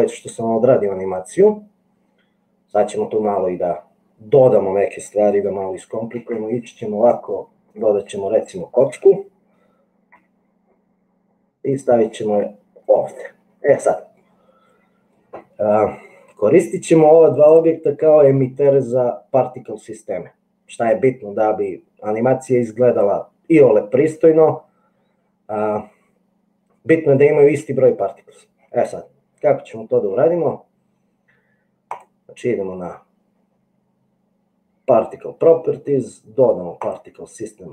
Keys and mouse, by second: 6.5 shift+a, 10.2 g, 14.3-15.5 middle drag, 17.5 click, 37.0 click.